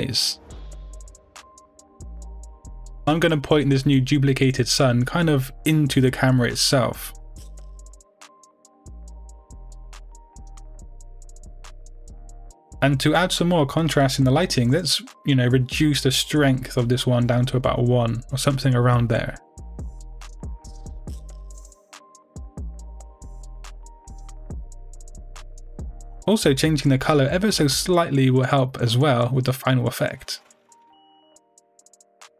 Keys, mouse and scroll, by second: 1.5 KP_7, 2.4 r, 4.1 click, 4.3 g, 5.2 click, 5.5-6.7 middle drag, 6.7-9.8 typing, 8.0 click, 8.9 click, 9.6 click, 10.6 click, 17.3-18.7 middle drag, 18.4 KP_0, 19.0 middle click, 19.1-24.9 scroll up 2, 19.4-25.8 middle drag, 24.9-25.8 scroll up 1, 25.8-27.8 drag, 25.9 Return.